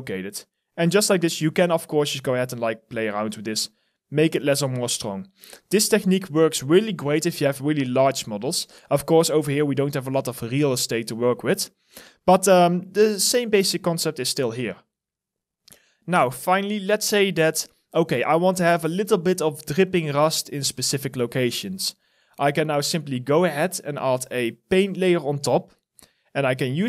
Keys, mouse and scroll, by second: 5.7 alt+middle click, 9.0 alt+right click, 9.4 alt+click, 12.1 alt+right click, 12.6 alt+middle click, 12.9 alt+click.